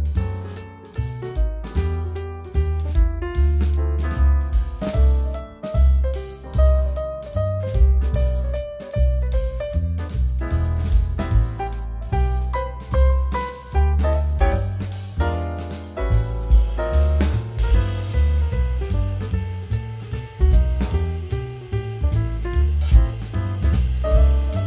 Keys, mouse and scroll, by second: 4.8 click, 6.0 z, 6.5 click, 11.5 ctrl+e, 12.7 click, 14.9 ctrl+z, 15.6 click, 21.0 click.